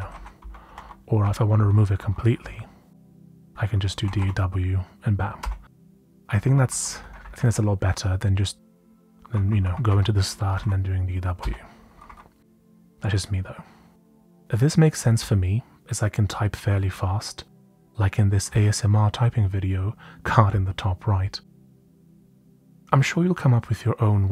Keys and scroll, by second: 0.0-5.4 typing, 6.3 Right, 9.9-11.4 typing, 11.8 Right, 12.0 Right, 16.3 typing, 22.7 typing.